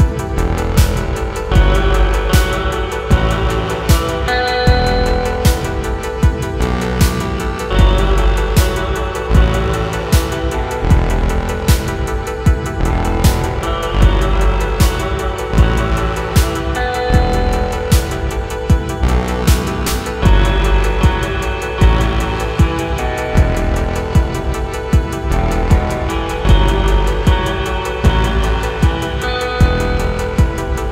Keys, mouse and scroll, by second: 0.0-0.8 typing, 0.0 shift+middle click, 0.0 scroll up 1, 0.4 scroll down 3, 0.4 shift+middle click, 0.9 scroll up 1, 1.5 ctrl+r, 1.9-13.6 typing, 1.9 click, 2.0 scroll down 1, 2.5 shift+middle click, 2.7 alt+click, 4.0 middle click, 4.3 click, 4.7 middle click, 4.8 shift+click, 4.9 middle click, 5.2 click, 5.3 middle click, 5.7 scroll up 2, 5.8 click, 5.9 shift+click, 6.2 click, 6.3 scroll down 2, 6.6 middle click, 6.8 alt+click, 7.4 scroll up 1, 7.4 middle click, 8.0 scroll down 2, 8.1 shift+middle click, 8.1-8.5 scroll up 2, 8.8 shift+middle click, 10.2 shift+middle click, 10.8 shift+middle click, 10.9 scroll up 2, 11.6 scroll up 1, 11.8 click, 13.1 scroll down 2, 13.2 scroll up 2, 13.4 ctrl+z, 13.9 scroll down 1, 14.0 middle click, 14.3 click, 14.9 KP_3, 15.0 Tab, 15.1 shift+middle click, 15.1 scroll down 3, 15.2 middle click, 15.3 Tab, 15.6 x, 15.7 middle click, 15.8 KP_3, 15.9 scroll up 7, 16.0 shift+middle click, 16.2 middle click, 16.5 Tab, 16.6 middle click, 16.8 scroll up 1, 16.9 middle click, 17.2-30.9 typing, 17.6 middle click, 18.2 scroll down 3, 18.2 shift+middle click, 18.3 scroll up 3, 18.4 alt+click, 20.7 ctrl+r, 21.6 alt+click, 22.8 alt+click, 23.3 shift+middle click, 23.4 scroll up 4, 23.8 shift+middle click, 23.9 alt+click, 24.3 scroll down 6, 24.4 shift+middle click, 24.4 scroll up 3, 24.5 shift+middle click, 25.2 alt+shift+click, 25.6 shift+middle click, 26.1 shift+middle click, 26.1 scroll up 2, 26.8 shift+middle click, 26.8 scroll up 1, 27.0 shift+middle click, 27.8 shift+middle click, 27.9 scroll up 1, 29.5 middle click, 29.6 shift+click, 29.8 middle click, 30.8 shift+click.